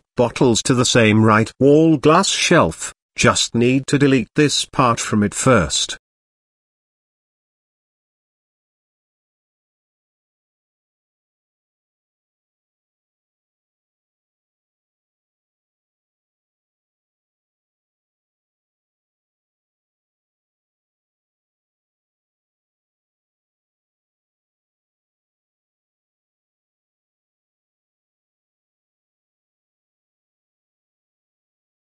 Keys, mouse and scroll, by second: 0.5-0.9 middle drag, 1.2 KP_7, 2.7 click, 3.8 x, 5.1 z, 5.6 click, 6.2 x, 7.0-8.3 middle drag, 8.4 z, 9.2 Tab, 9.7 middle drag, 10.2-10.7 drag, 11.3 KP_7, 12.1 z, 12.6 shift+middle click, 13.6 g, 15.8 KP_3, 17.0 g, 19.4 KP_1, 20.3 shift+middle click, 21.3-21.6 shift+middle drag, 22.3 g, 24.4 middle click, 24.8 z, 26.1 shift+middle click, 26.8 middle click, 27.6 s, 29.4 g, 31.5 r.